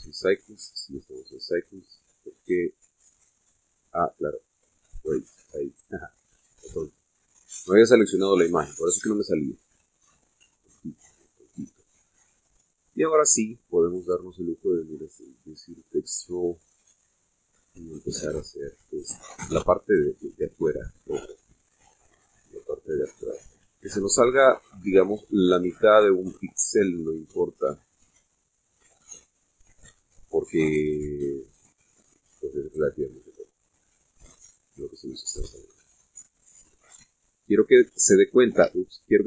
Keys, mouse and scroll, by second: 0.7 scroll down 1, 1.1 scroll up 1, 2.1-2.4 scroll up 1, 4.8 click, 6.0 click, 6.7-7.0 scroll down 1, 7.2 middle click, 8.3-8.9 scroll up 5, 8.9 shift+middle click, 9.7-10.1 shift+scroll up 3, 10.2-11.3 shift+middle drag, 11.5-11.8 shift+scroll up 3, 12.1 middle click, 13.1 click, 16.8 click, 18.0-18.9 drag, 19.1-19.7 scroll down 1, 20.1-21.9 drag, 22.0-35.7 drag, 36.2-36.7 middle drag, 36.9 middle click, 38.2-39.2 drag.